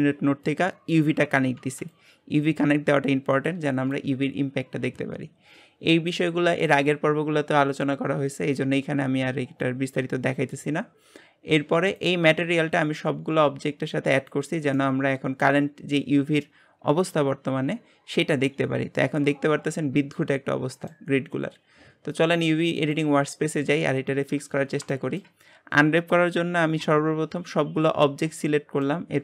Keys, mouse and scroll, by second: 11.9 click, 14.2 click, 14.8-22.8 middle drag, 22.8 click, 23.7-24.2 scroll down 3, 24.4 Tab, 25.0-25.4 shift+middle drag, 25.4 scroll up 2, 26.8 a, 28.4-29.2 shift+middle drag.